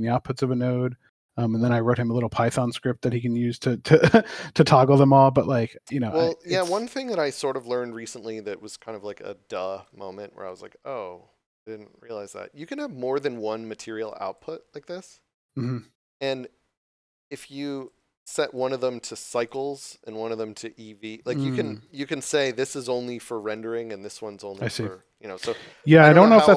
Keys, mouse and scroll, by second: 2.3 click, 4.6 shift+middle click, 7.4 right click, 8.5 scroll up 1, 12.7 click, 17.7 click, 24.8 click.